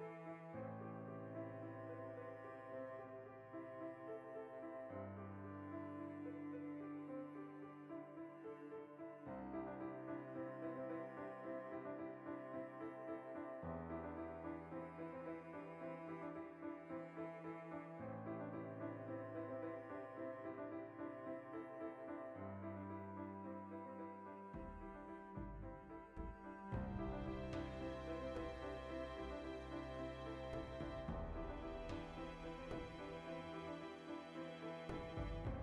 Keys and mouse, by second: 0.6 click, 2.4 ctrl+middle click, 3.2 click, 3.4 ctrl+middle click, 3.7 click, 3.9 ctrl+middle click, 4.3 click, 5.9 middle click, 7.5 q, 7.7 ctrl+middle click, 9.1-13.3 ctrl+middle drag, 9.1 q, 11.6 q, 12.3 Tab, 13.3 alt+right click, 13.5-14.9 middle drag, 14.9 right click, 15.1 middle click, 15.9 ctrl+right click, 16.2-17.2 middle drag, 17.2 ctrl+right click, 17.5-19.2 middle drag, 19.2 alt+o, 20.1 shift+d, 20.3 right click, 20.5 shift+middle click, 21.4 e, 23.1 click, 23.2 s, 24.0 click, 24.1-30.2 middle drag, 25.2 alt+q, 25.6 z, 27.4 ctrl+z, 28.6 z, 29.5 z, 30.2 right click, 30.4 l, 31.4-32.9 shift+middle drag, 31.8 alt+q, 32.9 alt+shift+right click, 33.7 v, 34.4 l.